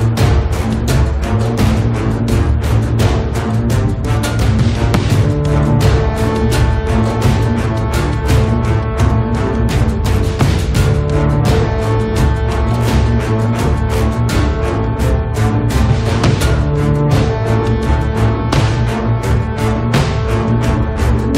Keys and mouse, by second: 0.1 1, 0.4 click, 0.8 f, 0.9 click, 1.0 right click, 1.2 middle click, 1.5-11.4 drag, 1.5 right click, 4.7 f, 11.4-15.4 middle drag, 11.8-14.8 drag, 11.8-15.4 right drag, 15.8 click, 15.8 middle click, 15.8 right click, 16.4-17.8 drag, 17.8-19.1 middle drag, 19.1 g, 19.3 f, 19.6-21.3 drag.